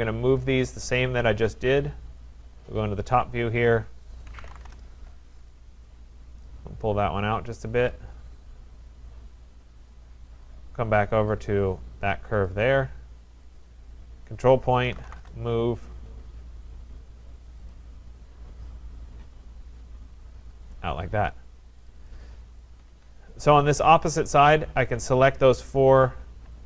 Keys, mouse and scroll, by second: 0.7 click, 0.9 click, 2.2-3.7 scroll, 4.1-5.0 typing, 5.5 click, 7.6 Return, 7.9 click, 8.3-8.6 scroll, 10.5 click, 11.4 click, 12.4 click, 13.6 click, 14.6-15.6 typing, 16.1-17.4 scroll, 17.7 click, 20.7 click, 21.9 click, 22.1 click, 22.7 Escape, 22.9 Escape, 23.2-23.6 scroll, 24.5 click, 26.0 click, 26.5 scroll.